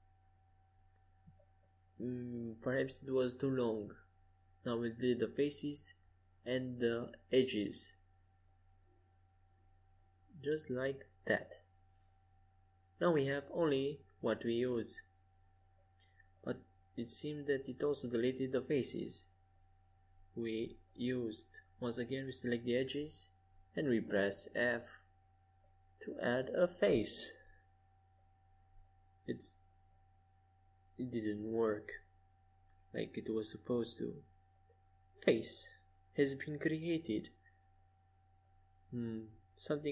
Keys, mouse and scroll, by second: 0.5 x, 3.6 c, 9.0 x, 13.6 middle click, 16.6-19.1 drag, 19.1 KP_5, 21.5-25.6 middle drag, 25.9-27.5 right drag, 26.7 f, 27.9 ctrl+z, 28.6-30.2 middle drag, 30.3-35.2 right drag, 35.2 f, 35.8-38.8 middle drag, 39.4 middle click.